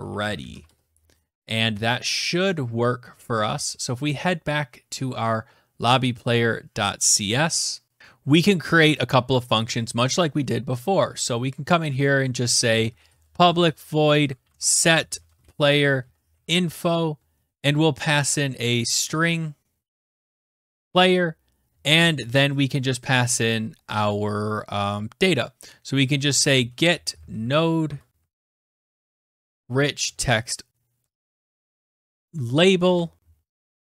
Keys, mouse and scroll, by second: 0.5 ctrl+s, 1.1 Return, 2.3 alt+Tab, 5.9 middle click, 6.0 scroll, 6.7-7.1 scroll, 7.3 click, 8.0 click, 8.0-8.3 scroll, 8.6 click, 9.6 Return, 9.8 Return, 10.6-21.1 typing, 21.1 Tab, 24.9-33.2 typing, 26.6 Tab, 28.7 Return.